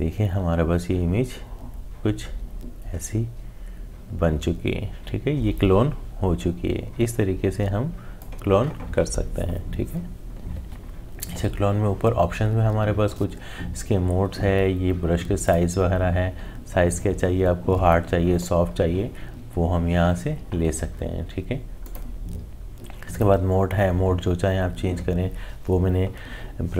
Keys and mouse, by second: 15.4 click, 21.8 click.